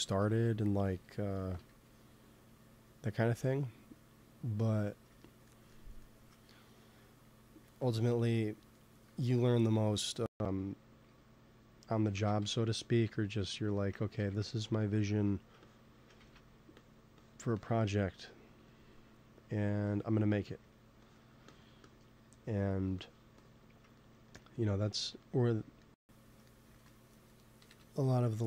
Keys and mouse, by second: 0.8 f, 1.6 f, 2.2-6.6 drag, 7.5 ctrl+s, 10.9 t, 12.0 shift+c, 12.3 t, 12.7 middle click, 14.1 shift+c, 14.3 f, 15.0 f, 15.6 click, 16.3 ctrl+z, 17.8 middle click, 18.4 click, 18.6 click, 18.8 click, 19.1-22.6 middle drag, 22.6-25.2 drag, 25.3 middle click, 25.5-26.6 middle drag, 26.6 ctrl+s, 27.6 KP_1.